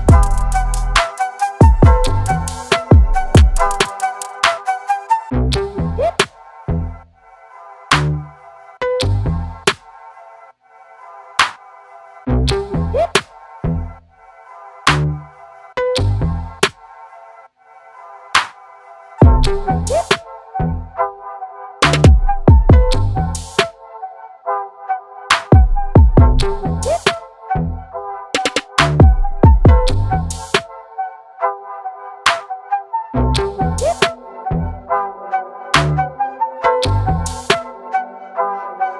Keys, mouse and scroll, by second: 0.2 click, 3.3-8.0 drag, 8.0 Tab, 8.6 shift+Tab, 11.0 Tab, 11.2 click, 16.8 Tab, 18.4 shift+Tab, 19.0 Left, 19.5 Tab, 21.5 click, 23.5 click, 27.7 i, 28.8 shift+click, 32.9 click, 34.1 click.